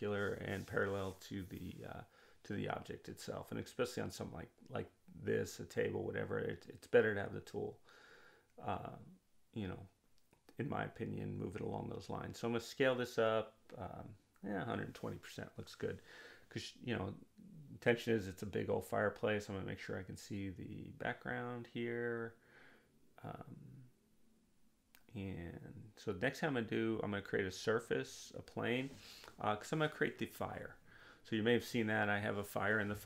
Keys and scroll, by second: 10.2-11.5 typing.